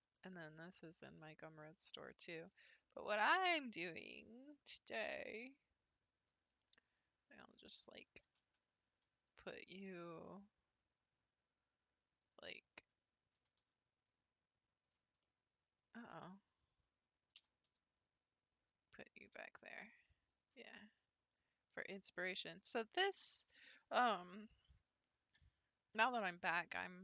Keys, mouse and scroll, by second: 2.3 scroll down 1, 2.7-4.0 shift+middle drag, 4.0 click, 4.7-5.0 shift+middle drag, 5.0-6.0 scroll up 4, 6.0-6.5 scroll down 3, 6.5 scroll up 1, 6.9 click, 7.5-7.8 scroll down 2, 7.8 shift+middle click, 8.1 scroll up 1, 8.2 g, 9.6-10.6 scroll down 4, 11.0 click, 12.2 click, 12.8 scroll down 1, 12.9 scroll up 1, 13.3 g, 13.6 y, 14.8 click, 15.2-16.5 middle drag, 16.5 click, 17.3 g, 19.4 s, 20.7-21.5 middle drag, 21.5 scroll up 1, 21.7-25.0 middle drag, 25.0-25.5 scroll up 5.